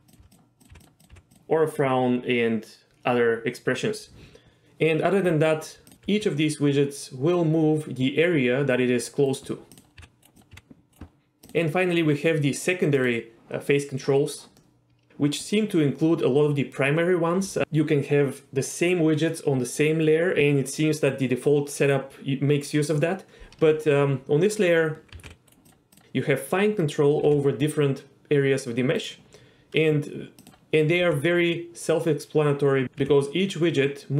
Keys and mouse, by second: 0.0-1.1 typing, 0.6 drag, 1.3 drag, 5.9 drag, 5.9 g, 6.4 g, 9.3 right drag, 9.7 click, 10.0 g, 10.5 g, 11.5 click, 13.0 click, 14.6-15.1 middle drag, 25.2 g, 25.5-26.0 right drag, 26.0 g, 27.2 g, 31.0-32.8 g, 33.0 g.